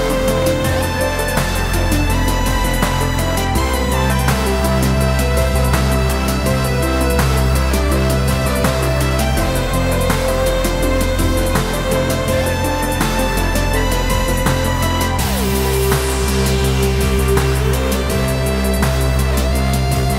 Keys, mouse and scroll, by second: 11.5-20.1 middle drag.